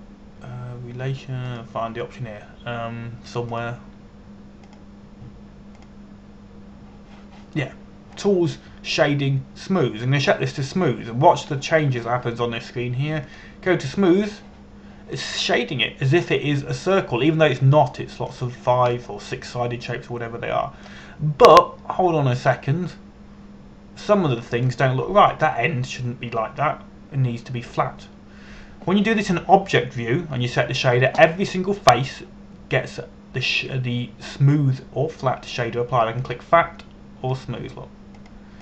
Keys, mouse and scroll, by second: 1.3 click, 15.0 click, 16.8-21.2 middle drag, 23.3-24.2 scroll down 1, 24.2 middle click, 37.9 click.